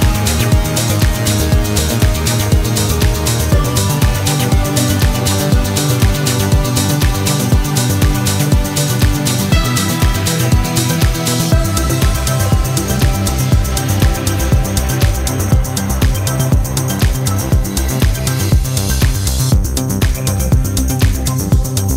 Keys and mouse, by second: 1.5 click, 3.1-3.9 drag, 5.4-10.8 drag, 11.8 click, 13.3-15.3 drag, 18.3-21.9 drag.